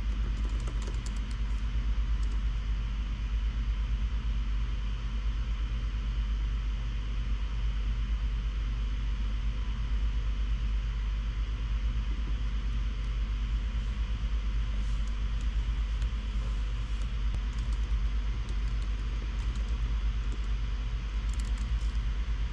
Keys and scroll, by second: 0.0-1.4 typing, 2.5 Tab, 17.1-20.6 typing, 21.6 Return, 21.7 Return, 21.9-22.5 typing.